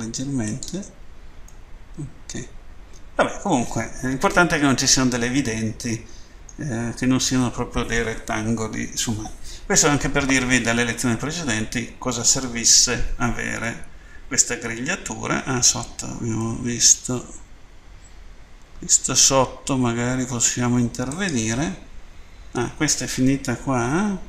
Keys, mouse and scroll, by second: 0.3 click, 1.5 middle click, 13.7 middle click, 16.4 middle click, 20.9 right click.